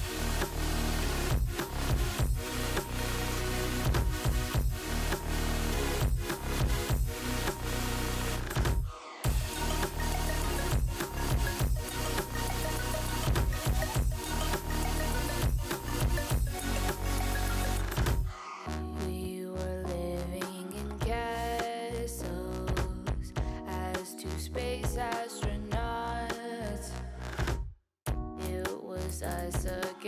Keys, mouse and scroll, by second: 0.3 scroll down 4, 0.6 drag, 0.9 middle click, 1.5 click, 1.6 Tab, 1.7 click, 1.9-2.3 shift+middle drag, 2.3-2.7 scroll up 6, 2.7 scroll down 2, 3.0-4.6 shift+middle drag, 4.6 scroll up 2, 4.8-5.8 middle drag, 5.8 KP_3, 6.6 shift+middle click, 6.7-7.5 scroll up 7, 7.5 click, 7.7 Tab, 8.1 Tab, 8.3 click, 9.0 shift+middle click, 9.4 Tab, 9.8 l, 10.3 g, 11.4 scroll down 3, 11.7 click, 11.8 Tab, 12.0 click, 12.2 scroll down 1, 12.4-12.8 middle drag, 12.8 scroll down 3, 13.0-14.6 shift+middle drag, 15.1 middle click, 15.5 click, 16.3 shift+middle drag, 16.5 click, 16.9 click, 18.1 middle click, 18.6-19.0 scroll up 4, 19.0 Tab, 19.6 alt+z, 19.9 click, 20.4 alt+z, 20.9 alt+z, 21.3 ctrl+l, 21.9 p, 22.4 scroll down 2, 22.6 click, 22.8 Tab, 23.0 click, 23.3 click, 24.6-25.6 drag, 25.9 scroll down 3, 26.1-27.3 middle drag, 27.3-28.0 drag, 28.0-29.4 middle drag.